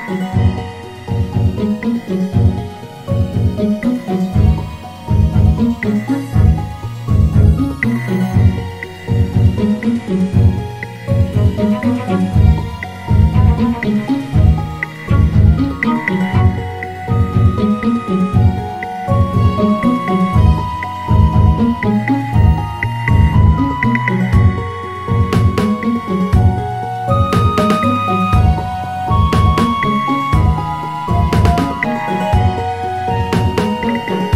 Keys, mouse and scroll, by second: 3.9-5.5 scroll down 2, 5.5 g, 7.4 click, 8.1-9.0 scroll up 1, 9.0 g, 11.6 click, 12.8-13.4 scroll down 2, 15.5-18.5 drag, 19.7-22.9 drag, 26.8-27.9 scroll up 1, 27.9 Tab, 29.3 g, 31.9 click, 32.7 g.